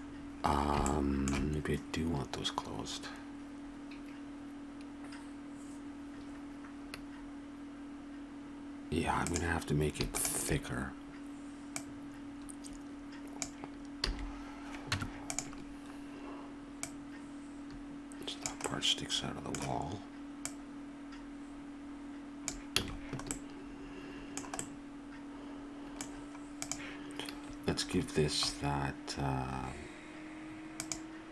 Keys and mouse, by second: 0.4-2.5 middle drag, 9.3-13.3 right drag, 14.9 Tab, 14.9 a, 16.8-18.1 drag, 18.5 click, 20.5-22.5 drag, 22.8 a, 25.9 middle click, 26.5-29.4 right drag, 30.7-31.3 right drag.